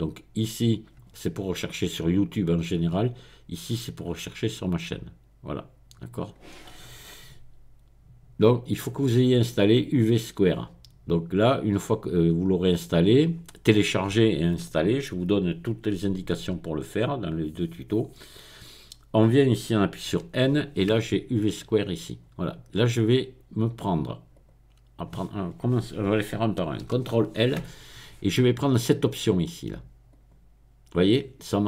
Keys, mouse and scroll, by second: 8.5 click, 20.1 n, 21.6 click, 21.9-23.1 middle drag, 24.3 click, 24.8-27.5 middle drag, 26.9 ctrl+i, 30.1 click, 30.5-31.6 middle drag.